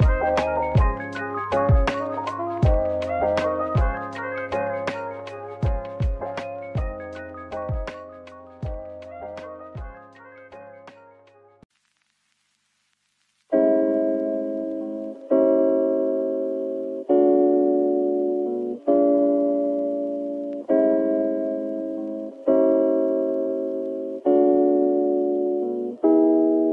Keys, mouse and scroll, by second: 1.5 shift+click, 3.4 middle click, 5.3 right click, 10.4 Tab, 10.8 middle click, 12.0 Tab, 14.1 click, 15.8 i, 17.0 right click, 19.5-21.1 typing, 21.4 right click, 22.1 typing, 23.2 typing, 25.1 ctrl+b, 25.7 right click.